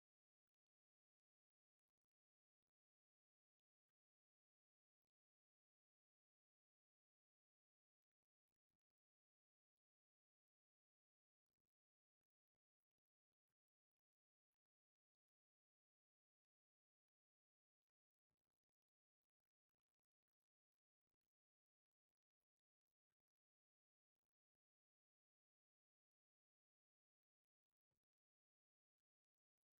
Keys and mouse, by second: 14.8 z, 16.5 Tab, 17.9 Tab, 20.1 shift+d, 22.8 m, 25.6 Tab, 26.7 i.